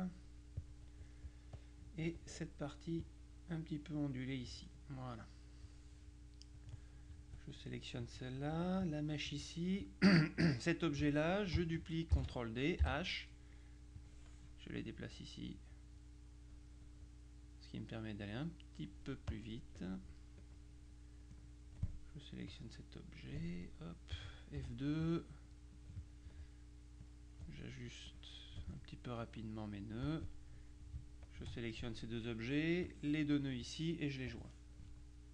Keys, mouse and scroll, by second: 0.6 right click, 1.6 click, 3.1-5.2 drag, 6.6 click, 8.9 shift+click, 9.9 click, 12.2 ctrl+d, 12.9 h, 14.0-20.4 drag, 20.5 click, 21.4 click, 22.6-23.9 drag, 24.7 F2, 25.8 click, 27.1 click, 28.2 click, 29.5 click, 31.4 shift+click, 33.0 click, 34.4 click.